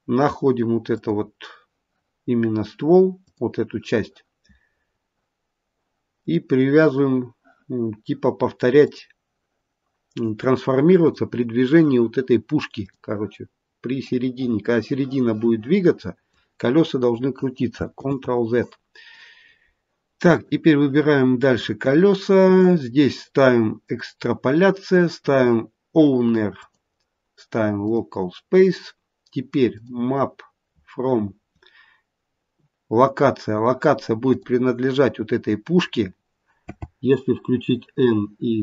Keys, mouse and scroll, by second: 3.1 click, 6.1 click, 8.7 click, 11.0 click, 14.0 click, 17.9 ctrl+z, 20.2 click, 23.7 click, 26.5 click, 29.6 click, 30.6-31.8 scroll down 1, 31.8-32.7 scroll down 3, 34.3 click, 36.5 n.